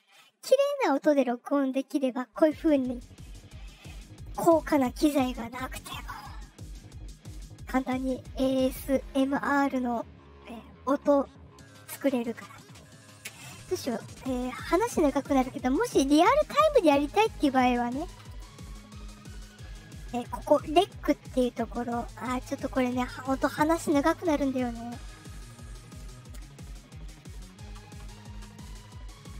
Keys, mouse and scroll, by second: 1.7 click, 16.4 click, 20.2 click, 25.3 click.